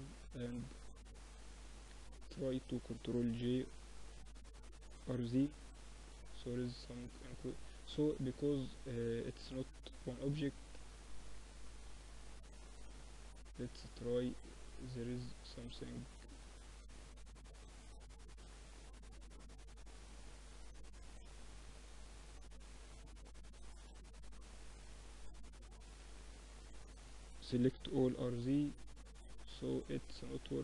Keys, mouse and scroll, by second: 0.8 a, 1.0 a, 4.0 r, 6.1 middle click, 6.6-11.7 drag, 11.7-19.7 right drag, 19.7-24.0 drag, 20.6 r, 22.8 r, 25.2 a, 26.1 a, 26.8 r.